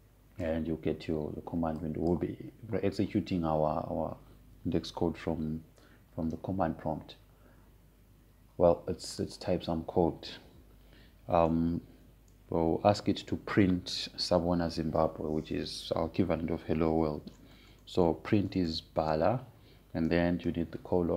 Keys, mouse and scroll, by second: 3.6-6.4 drag, 10.7 click, 19.7-21.1 typing.